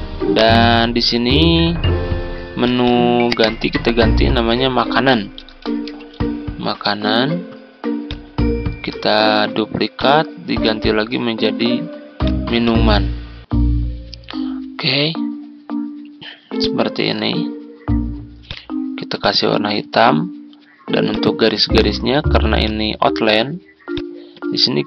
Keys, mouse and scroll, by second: 1.1-2.6 ctrl+scroll up 1, 2.6 click, 5.1-6.6 typing, 8.0 click, 9.1 ctrl+d, 9.9-14.9 drag, 22.6 shift+click, 23.8 shift+click.